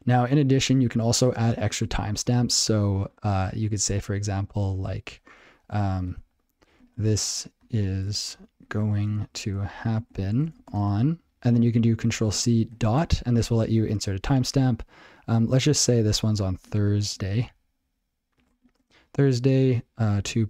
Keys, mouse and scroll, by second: 0.6 ctrl+a, 7.1-11.2 typing, 12.7 space, 16.1-20.4 typing.